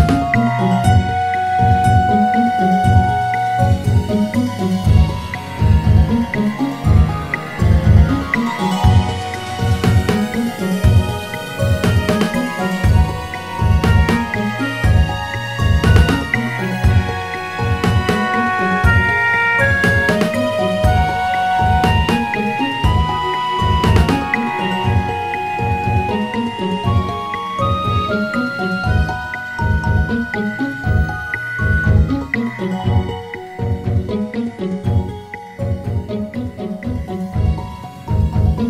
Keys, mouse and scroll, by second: 1.1 Tab, 1.7-3.3 scroll down 1, 3.3-6.3 right drag, 13.1 Tab, 14.7-15.9 scroll up 1, 15.9 r, 25.8 Tab, 29.1 g, 32.8 s.